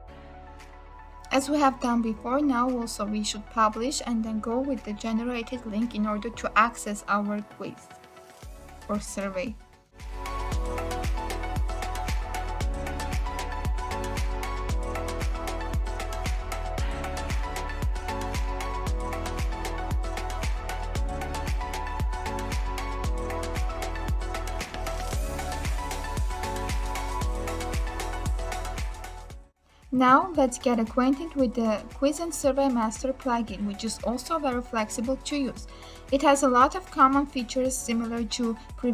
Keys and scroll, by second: 1.4 ctrl+v.